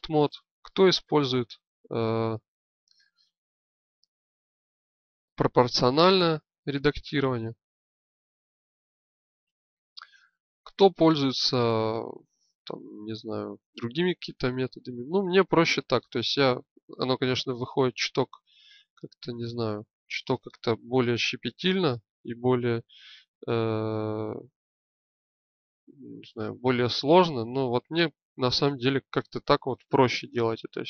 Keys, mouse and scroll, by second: 18.2 click, 27.7-28.8 drag.